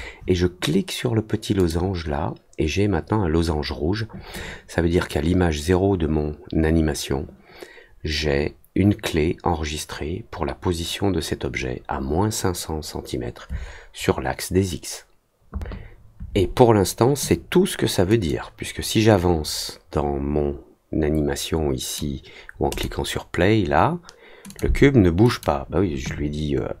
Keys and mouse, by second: 1.5 click, 18.2-21.9 drag, 22.6 click, 24.4 click, 25.2 click.